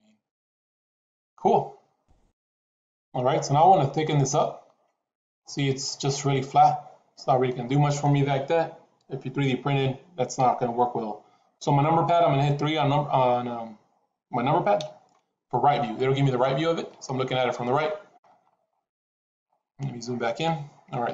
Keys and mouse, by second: 4.0-7.1 middle drag, 7.3 middle click, 14.7 KP_3, 21.0 KP_3.